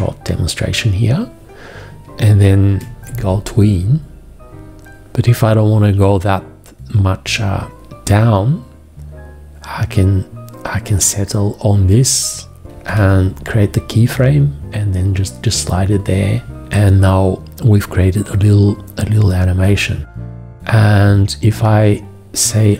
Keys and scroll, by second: 2.5 4, 12.7 x, 16.5 4.